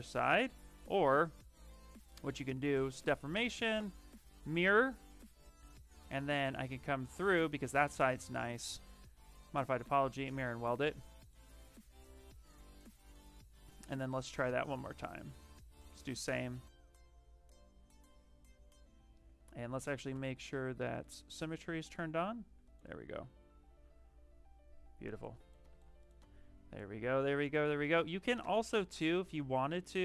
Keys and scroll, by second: 0.6 z, 10.4 q, 19.3 ctrl+z, 20.0 x.